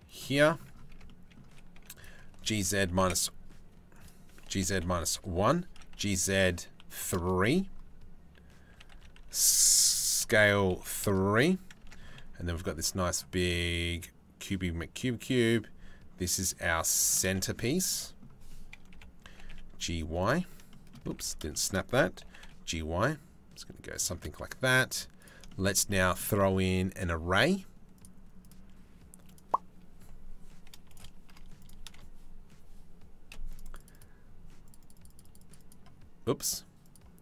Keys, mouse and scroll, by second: 0.5 Tab, 1.3 3, 1.5 click, 1.9 g, 4.0 g, 5.2 s, 8.3 a, 8.5 s, 11.0 KP_7, 11.5 Tab, 12.1 g, 17.1 shift+middle click, 17.5 middle click, 18.5 KP_7, 18.9 g, 20.3 shift+middle click, 20.9 ctrl+z, 21.8 g, 24.5 z, 27.6 click, 28.0 click, 30.5 click, 31.2 click, 33.2 click, 34.3 click, 36.4 click, 36.8-37.2 middle drag.